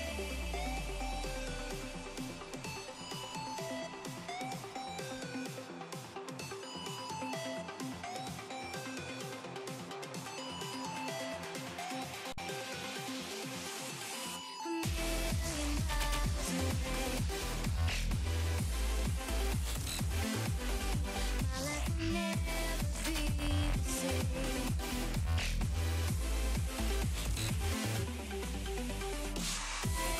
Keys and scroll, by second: 17.0 z, 19.0 ctrl+z, 19.8 ctrl+z.